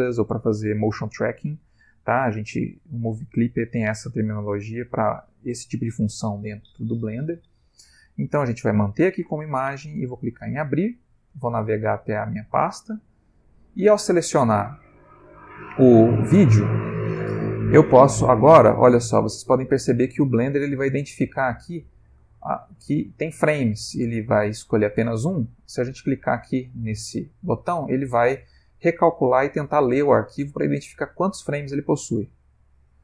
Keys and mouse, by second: 10.1 click, 14.6 middle click, 32.3 click.